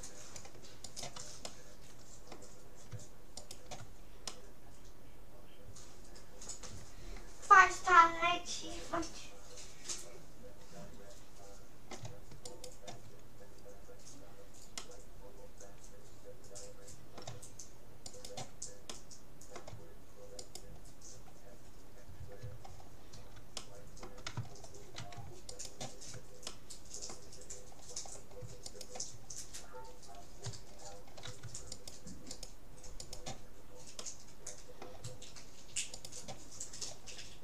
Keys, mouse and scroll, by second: 1.5-3.1 middle drag, 3.5-5.1 right drag, 4.3-5.9 middle drag, 12.5-14.1 right drag, 13.7-16.5 middle drag, 18.1-19.7 right drag, 18.9-20.5 middle drag, 20.5-22.1 right drag, 21.9-25.5 middle drag, 25.5-27.1 right drag, 26.5-28.7 middle drag, 28.7-30.5 right drag, 29.6 middle click, 30.5-31.7 middle drag, 31.7-34.7 right drag, 34.1-35.7 middle drag, 35.9-37.4 right drag.